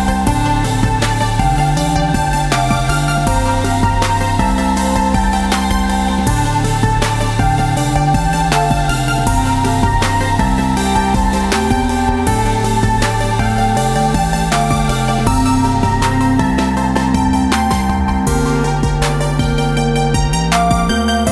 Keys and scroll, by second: 0.7 ctrl+d, 2.3 ctrl+z, 2.5 ctrl+z, 2.7 ctrl+z, 2.9 ctrl+z, 3.1 ctrl+z, 3.5 ctrl+z, 4.0 ctrl+z, 4.3 ctrl+z, 4.5 ctrl+z, 4.7 ctrl+z, 4.9 ctrl+z, 5.2 ctrl+z, 5.4 ctrl+z, 5.6 ctrl+z, 5.9 ctrl+z, 6.2 ctrl+z, 6.4 ctrl+z, 6.6 ctrl+z, 6.8 ctrl+z, 7.2 ctrl+z, 7.5 ctrl+z, 9.0 v, 13.4 ctrl+d, 13.9-16.0 typing, 17.4 v, 19.2 Tab.